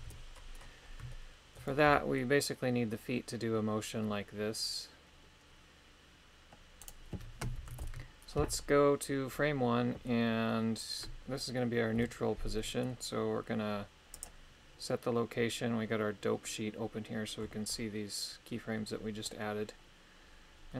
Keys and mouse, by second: 0.0 KP_3, 1.1 shift+middle click, 1.8 g, 7.8 shift+Left, 11.9 i.